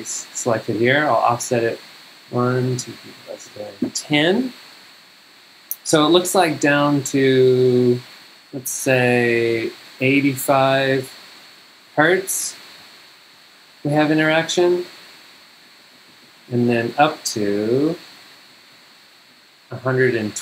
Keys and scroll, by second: 2.3 super+Down, 15.5 super+Up, 19.3 super+Down.